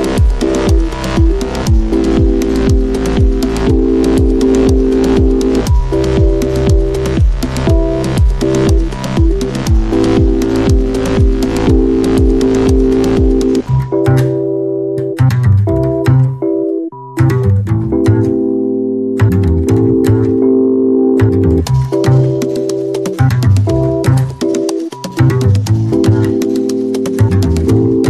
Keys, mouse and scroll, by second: 6.1 click, 6.1 typing, 11.5 click, 11.5 typing, 15.3-18.1 drag, 18.3 click, 18.3 typing, 20.6-28.0 drag.